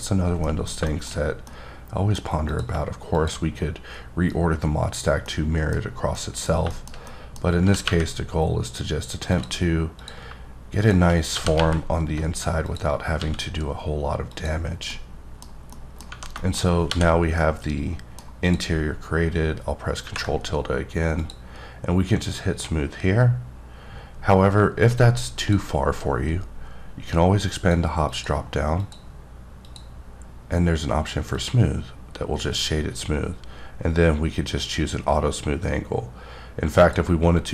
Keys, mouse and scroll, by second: 0.1-0.5 scroll down 2, 0.5 middle click, 0.9 double middle click, 1.2-1.5 scroll down 1, 1.5 middle click, 2.5 click, 3.2 shift+click, 5.3 middle click, 5.8-6.2 scroll up 2, 6.2 middle click, 7.0 scroll down 1, 7.1 middle click, 7.4 scroll up 2, 7.6 g, 7.9 y, 10.0 click, 11.4 g, 11.6 y, 12.7 click, 13.2 s, 14.3 click, 14.7 scroll down 2, 14.9 middle click, 15.4-15.8 scroll down 2, 15.8 middle click, 16.4 middle click, 16.9 h, 17.4 middle click, 18.5 click, 21.2 click, 27.6 click, 28.1 click, 28.8 click, 29.7 click, 31.3 click, 36.8 click.